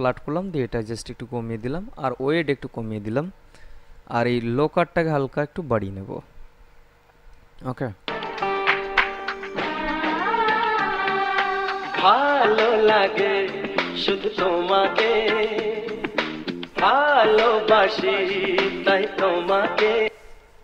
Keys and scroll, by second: 8.3 space, 20.2 space.